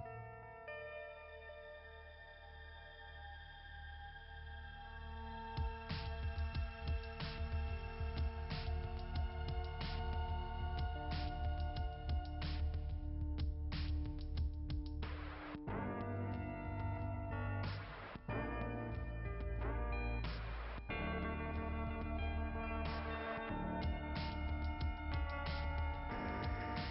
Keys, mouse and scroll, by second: 4.0 click, 4.2 click, 4.6 click, 10.8 click, 11.2 click, 11.5 click, 15.8 click, 19.4-20.5 typing, 21.7-22.1 typing, 23.6 click, 24.0 click, 24.3 click, 24.5 click.